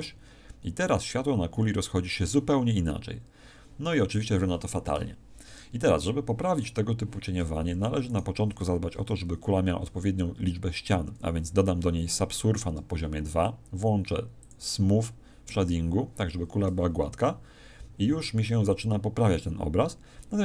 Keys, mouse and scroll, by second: 7.3 Escape, 8.0 right click, 9.8 ctrl+2, 14.3 click.